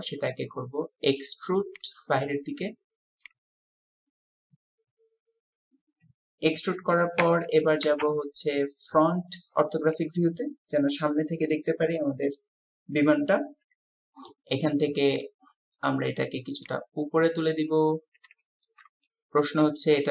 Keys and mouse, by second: 3.3-6.1 drag, 7.2 KP_3, 8.0 KP_1, 17.7 click, 18.4 shift+click, 19.9-20.1 drag.